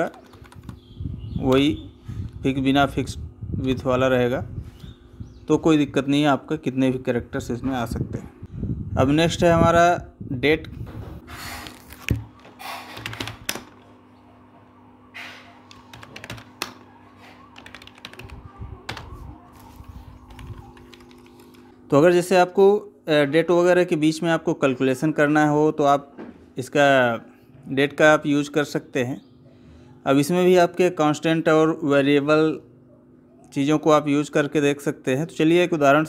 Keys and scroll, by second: 13.3 space, 20.2 Down, 20.7 Up.